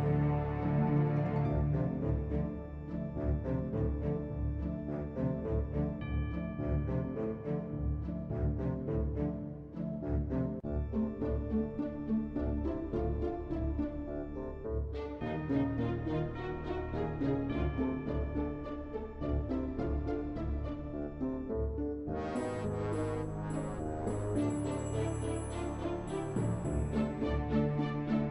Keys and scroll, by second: 5.9 ctrl+Delete.